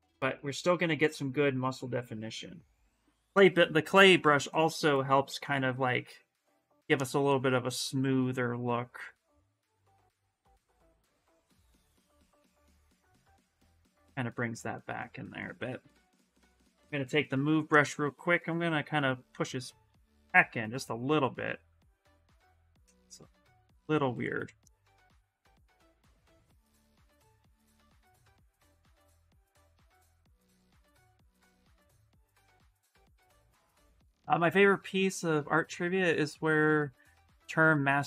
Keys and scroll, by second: 15.4-17.4 typing, 19.9 s, 23.5 s, 24.9 s.